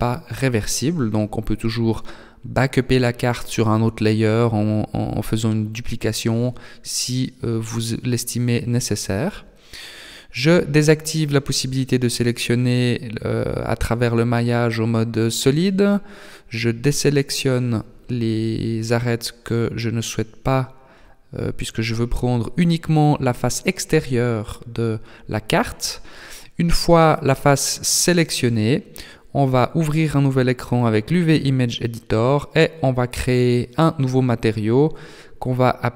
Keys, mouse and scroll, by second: 8.2 click, 9.3 KP_1, 10.6 b, 12.7 middle click, 14.5 alt+shift+right click, 15.6 alt+shift+right click, 16.6 middle click, 19.0 middle click, 21.6 KP_1, 22.5 scroll down 1, 23.8 click, 25.9 click, 29.4 click, 30.5 click, 32.9 click, 33.7 click.